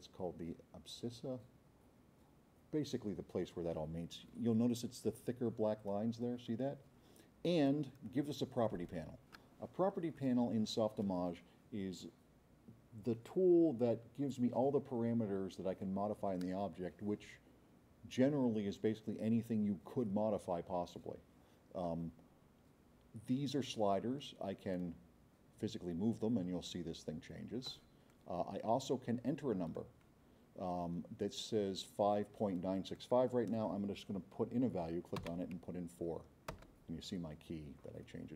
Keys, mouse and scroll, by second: 7.7-8.9 drag, 24.7-27.8 drag, 35.2 KP_4, 36.6 KP_Enter.